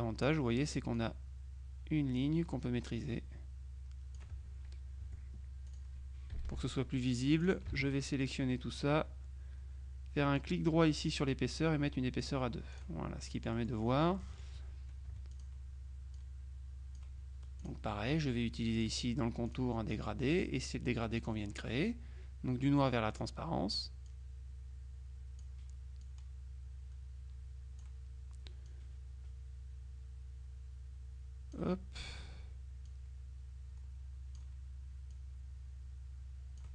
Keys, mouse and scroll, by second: 1.0-4.7 drag, 5.1 F1, 5.8 click, 6.4 KP_Subtract, 7.4 click, 8.1 ctrl+a, 11.2 right click, 12.3-13.4 drag, 13.3 middle click, 13.4-15.0 middle drag, 15.2 F2, 15.4 click, 16.2 click, 17.7 click, 18.8 click, 19.6 click, 20.4 click, 21.3 click, 23.0 middle click, 24.2-26.0 drag, 26.1-28.4 drag, 28.8-32.1 drag, 33.0-35.0 drag, 35.2-36.7 drag.